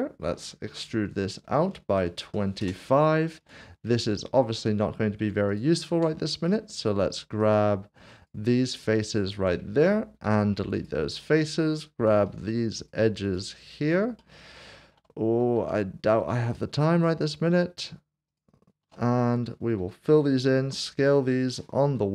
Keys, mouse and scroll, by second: 0.6 typing, 1.9 typing, 2.6 Return, 3.4 click, 3.9 middle click, 5.2 Tab, 6.4 middle click, 7.4 click, 8.1 alt+click, 10.2 x, 10.8 click, 12.1 2, 12.8 click, 14.2 middle click, 14.8 shift+middle click, 15.4 scroll up 1, 15.7 shift+middle click, 17.1 shift+click, 18.3 alt+shift+click, 19.8-20.6 typing, 21.8 typing.